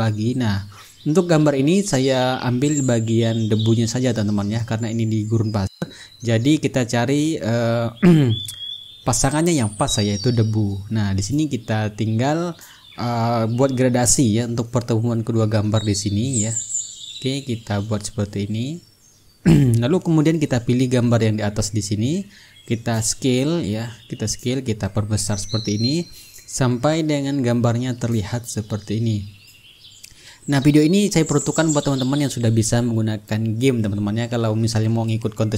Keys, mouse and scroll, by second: 0.0 click, 1.2 click, 2.9-5.1 drag, 5.6 click, 6.4 click, 7.3 ctrl+middle click, 10.2 click, 11.2 click, 12.4 click, 13.6 click, 14.8 click, 16.6-20.5 ctrl+drag, 20.8 click, 22.5 click, 24.1-27.0 drag, 27.1 click, 29.1-35.5 drag.